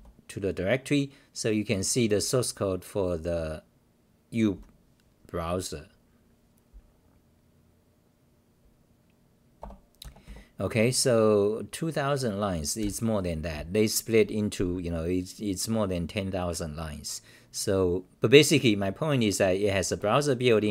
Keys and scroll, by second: 5.2-7.0 scroll down 8, 9.6 Return, 12.8 ctrl+w, 13.5-15.2 t, 15.8-16.6 scroll down 5, 16.6-19.6 scroll down 50, 20.5-20.7 scroll down 40.